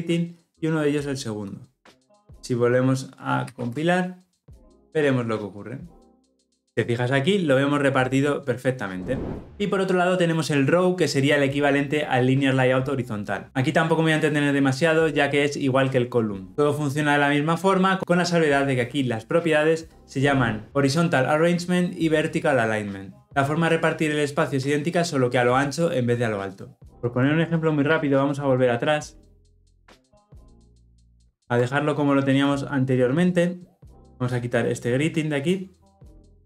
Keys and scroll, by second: 20.3 ctrl+z, 28.3 ctrl+z, 28.8 ctrl+z, 29.7 ctrl+z, 30.3 ctrl+z, 31.2 ctrl+z.